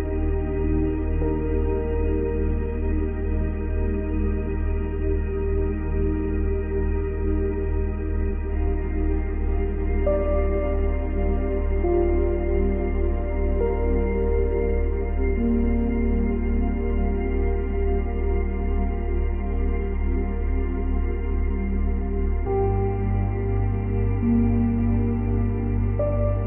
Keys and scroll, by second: 15.2 space, 17.3 space.